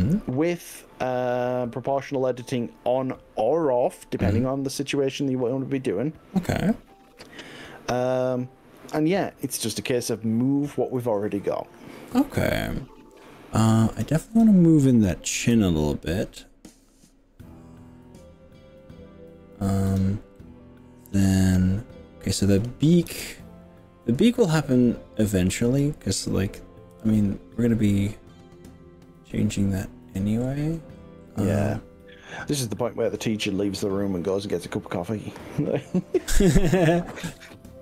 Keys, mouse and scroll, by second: 13.7 click, 15.4 g, 15.8-16.2 scroll up 4, 17.3-18.0 scroll up 3, 20.1 click, 20.4-22.4 middle drag, 23.1 KP_3, 25.5 click, 27.0 g, 30.1-30.9 scroll up 6, 31.1-31.9 scroll down 7, 33.3 scroll up 1, 34.1 scroll up 2, 36.8 click, 37.5 click.